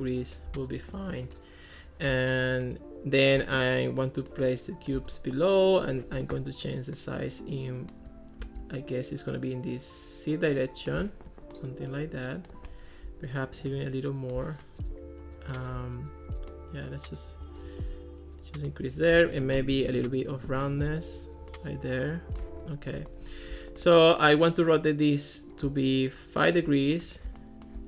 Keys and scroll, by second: 8.4 super+z, 19.8 1, 20.0 Return.